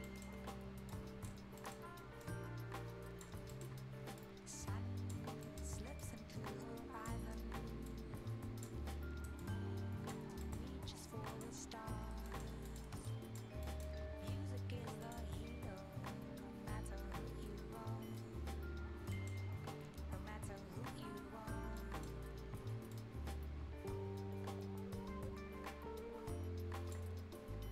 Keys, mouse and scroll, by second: 0.0 right click, 0.9 click, 1.5 scroll down 1, 1.6 right click, 1.8 scroll up 1, 2.2 click, 3.4 scroll up 1, 3.5 right click, 4.2 click, 5.2 scroll up 1, 5.4 right click, 6.0-7.9 drag, 7.9-9.4 shift+drag, 9.4 click, 10.3 scroll down 1, 10.4 right click, 11.3 click, 11.6 scroll down 1, 11.9-12.3 scroll up 1, 12.3 right click, 12.7 click, 13.0 ctrl+shift+click, 13.6 shift+right click, 15.0 shift+click, 17.3-18.1 shift+scroll up 2, 19.1 right click, 21.4-21.8 shift+scroll up 1, 21.8 shift+right click, 22.2-22.9 shift+scroll up 1, 22.9-27.5 shift+drag, 27.5 shift+scroll up 1.